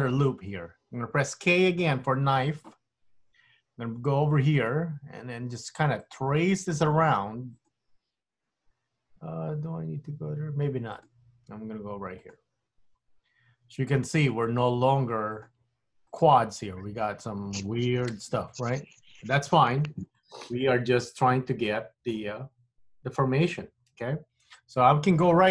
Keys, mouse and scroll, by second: 0.1 middle click, 0.6 scroll up 1, 0.8-2.6 scroll down 2, 2.6 k, 20.2 middle click, 24.0 KP_1.